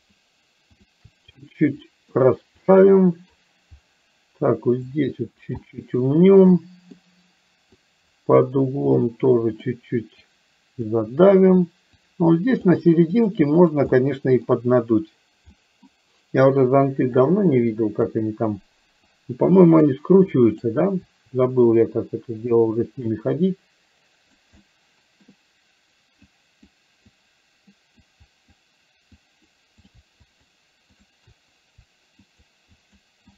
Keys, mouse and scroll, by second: 0.1 shift+click, 1.5 middle click, 2.7 middle click, 5.0 click, 5.6 middle click, 6.6 middle click, 7.8 click, 9.0 click, 10.3 click, 12.1 click, 13.3 click, 14.0 middle click, 15.7 middle click, 17.2-18.2 drag, 19.2 click, 20.5 click, 21.8 click, 23.1-24.5 drag, 24.6 middle click, 26.3 click, 27.2 click, 28.1 click, 29.2 click, 30.2 shift+click, 31.1 shift+click, 32.3 shift+click, 32.8 shift+click.